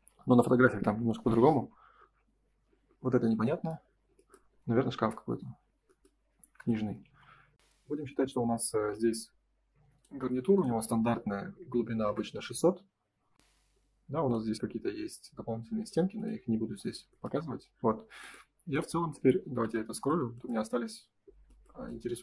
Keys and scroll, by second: 7.0 ctrl+s, 8.8 m, 12.0 Return, 13.2 space, 21.2 F3.